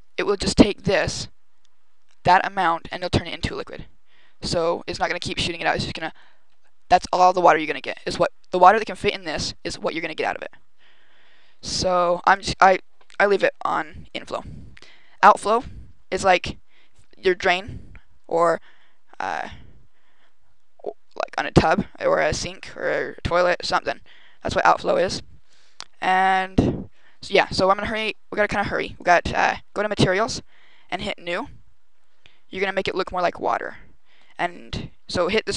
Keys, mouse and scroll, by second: 12.1 click, 15.1 click, 27.2 right click, 28.8 click, 30.8 click, 31.4-32.0 scroll down 6, 32.7 click.